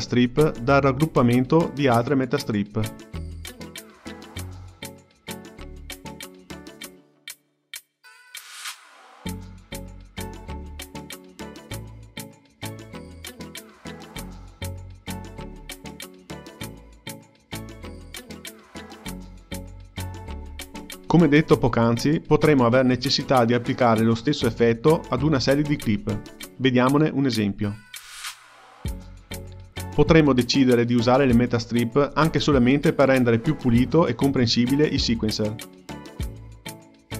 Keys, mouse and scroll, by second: 0.6-2.6 drag, 2.9 click, 4.3 ctrl+g, 4.7 click, 6.1 shift+click, 6.8 ctrl+g, 7.8 click, 8.8 ctrl+g, 10.3 Tab, 10.8 click, 11.0 Tab, 11.9 Tab, 12.4 click, 12.5 Tab, 13.9 click, 14.2 Tab, 14.9 Tab, 15.2 click, 15.4 Tab, 15.9 Tab, 17.8 Tab, 18.5 Tab, 20.6 click, 22.1 click, 22.8 ctrl+g, 23.5 click, 23.9-24.9 drag, 24.9-25.7 scroll down 3, 25.7-27.4 drag, 28.1-29.1 drag, 29.8 click, 29.9 click, 30.6 ctrl+g, 31.3-32.6 drag, 32.6-33.0 scroll down 3, 33.0 click, 33.6-34.0 scroll down 3, 34.0-37.0 drag.